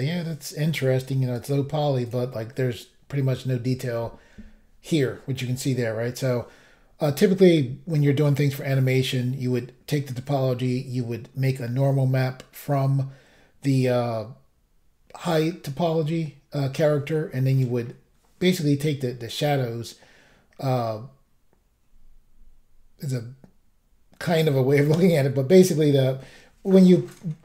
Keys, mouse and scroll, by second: 1.3 click, 1.4 click, 2.0 click, 2.2 click.